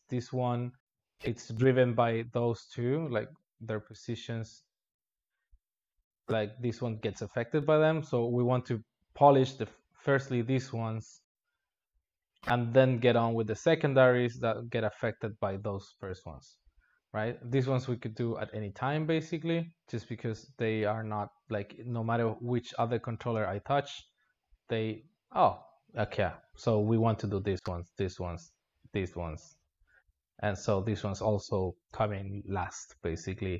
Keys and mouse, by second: 2.9 click, 3.2 g, 9.3 click, 16.0 g, 18.3-19.8 click, 19.8-22.0 drag, 22.3 g.